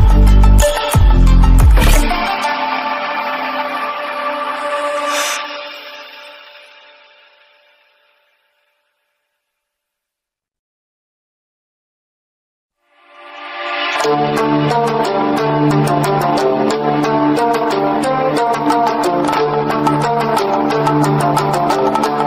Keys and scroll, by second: 1.5 ctrl+=, 3.9 ctrl+-, 6.3 ctrl+=, 15.9 ctrl+-.